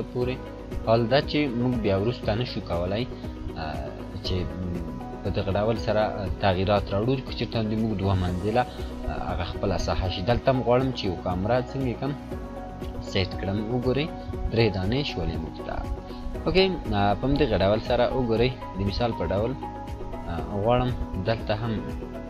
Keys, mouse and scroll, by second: 0.3-0.6 scroll up 1, 1.3-2.4 drag, 4.2-4.5 scroll down 1, 9.4-10.3 drag, 13.7 scroll down 1, 16.0 scroll down 1, 18.4 scroll up 1, 19.6 scroll down 1, 21.2-22.2 scroll up 1.